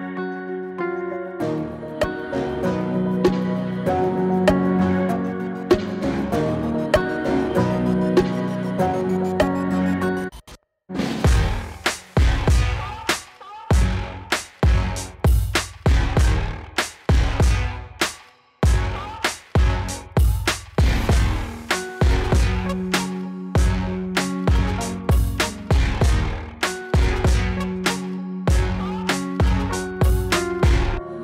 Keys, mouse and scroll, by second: 11.7 click, 12.7 ctrl+k, 15.2-16.7 drag, 15.6 click, 15.9 click, 17.2 Right, 19.3 click, 20.5 ctrl+k, 21.1 Right, 21.4 click, 21.5 ctrl+k, 21.8 Right, 22.0 click, 22.4 ctrl+k, 22.5 Right, 22.8 click, 22.9 ctrl+k, 23.1 Right, 23.3 click, 23.4 ctrl+k, 23.7 click, 24.7 Right, 24.9 click, 25.1 ctrl+k, 25.2 Right, 25.5 ctrl+k, 25.8 click, 28.4 space, 30.4-31.2 drag.